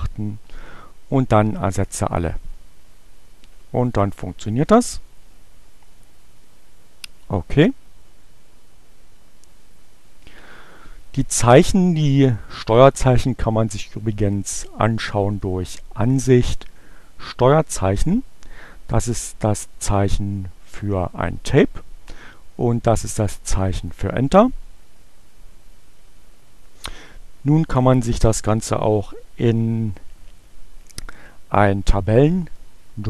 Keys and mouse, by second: 1.7 click, 3.9 click, 4.8 click, 14.5-15.7 drag, 17.0 click, 18.6-19.7 drag, 22.6-24.2 drag.